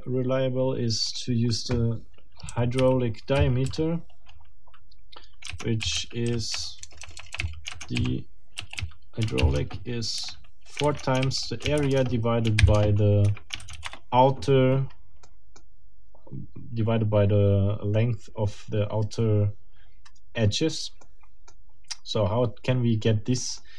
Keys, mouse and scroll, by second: 1.1 scroll up 2, 2.5 k, 2.8 w, 3.4 i, 3.6 h, 5.8-10.2 typing, 11.2-13.7 typing, 13.3 Escape, 13.8 Return, 15.3 middle click, 21.0 middle click, 23.4 middle click.